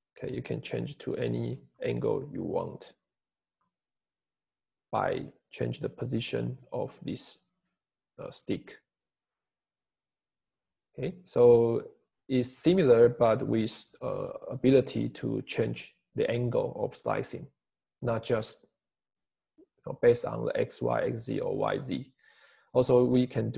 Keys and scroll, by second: 1.6 Escape, 3.1 Escape, 13.5 Escape.